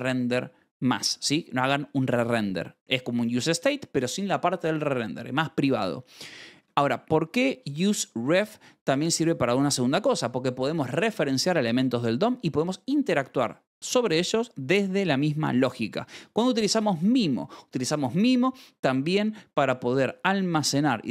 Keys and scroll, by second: 2.5 Escape, 6.1 Escape, 6.2-7.0 typing, 13.0 Escape, 15.8 e, 17.1 Escape, 17.8 v.